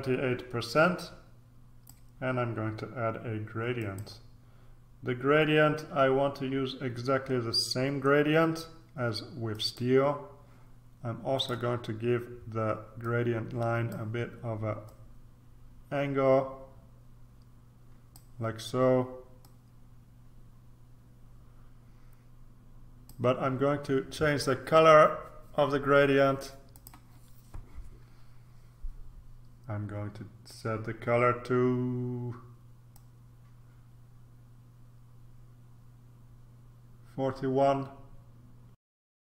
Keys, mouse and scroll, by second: 3.8 click, 9.5 click, 11.3 click, 13.0 click, 14.8-18.7 drag, 19.4-23.6 drag, 26.7 click, 32.9-38.8 drag, 38.9 click.